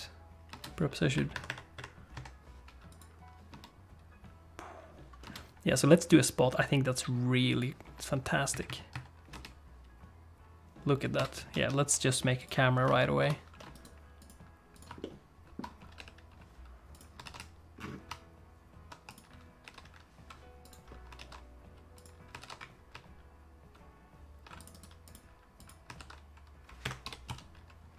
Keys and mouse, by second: 0.5 space, 1.1 click, 2.2 click, 2.9 click, 3.5 space, 5.2 space, 5.8 click, 7.5 click, 8.6-9.6 shift+drag, 9.3 space, 11.2 space, 11.5 shift+a, 13.2 ctrl+alt+n, 13.8-14.8 right drag, 15.0 ctrl+click, 15.9 g, 17.2 shift+f, 19.6 g, 21.2 shift+f, 22.4 shift+f, 24.7 right click, 25.9 shift+f, 27.0 g.